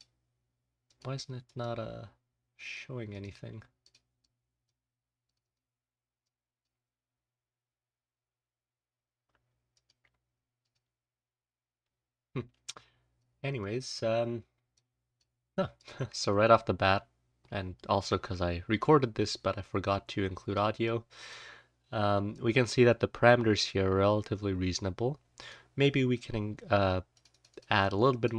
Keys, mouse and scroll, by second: 2.6 click, 3.0 click, 3.8 click, 4.1-4.6 drag, 5.2 click, 5.4 click, 6.2-6.6 drag, 12.7-13.5 scroll up 1, 13.1-13.5 drag, 14.7-15.1 drag, 15.7-20.5 drag, 16.7-18.9 scroll up 1, 18.9-19.9 scroll up 1, 20.5-21.1 scroll up 1, 20.8 click, 22.2-25.4 drag.